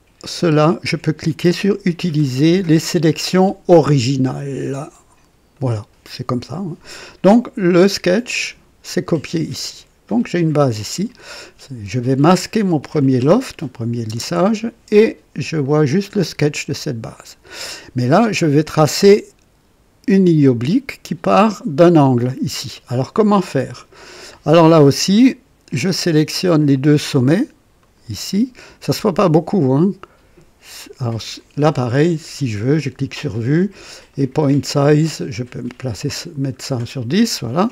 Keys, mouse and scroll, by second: 5.5 click, 12.5 click, 14.0 space, 15.6 click, 27.7 click, 31.9 click, 33.1 click, 34.1 click, 34.7-35.0 scroll up 2, 35.3 scroll up 1, 35.9 scroll up 1, 37.0 click.